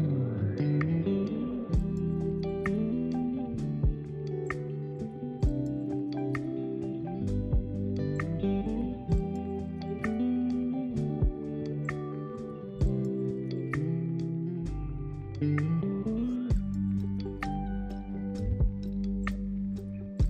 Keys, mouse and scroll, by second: 0.4 ctrl+z, 1.8 click, 2.3-4.8 middle drag, 4.8 f, 5.2 middle click, 6.0 i, 8.8 scroll down 2, 8.9-12.6 middle drag, 12.6 scroll down 1, 12.8-18.9 middle drag, 18.9-20.1 drag, 20.1 Tab.